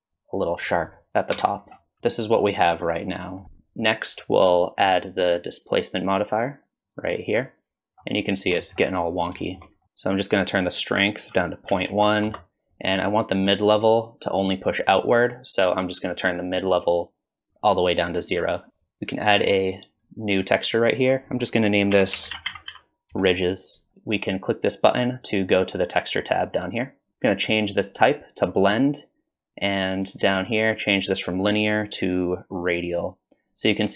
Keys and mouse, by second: 0.2-1.3 drag, 1.4 Tab, 2.0 alt+z, 2.0-3.4 middle drag, 4.9-7.0 drag, 8.6 middle click, 9.4 shift+middle click, 11.2-12.5 drag, 13.9-17.5 drag, 19.9 click, 21.0-23.9 drag, 25.1 click, 28.0-30.5 drag, 31.3-32.7 drag.